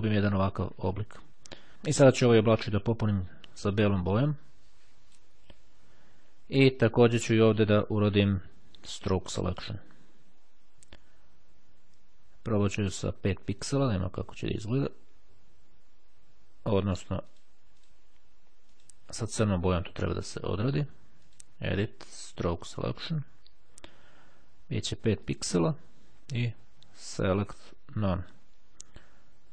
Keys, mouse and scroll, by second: 3.8-5.8 drag, 7.5 click, 9.6 click, 13.8 click, 17.4-18.5 drag, 18.8 click, 21.4 click, 22.9 click, 24.8-25.9 drag, 27.4 click, 28.2 click.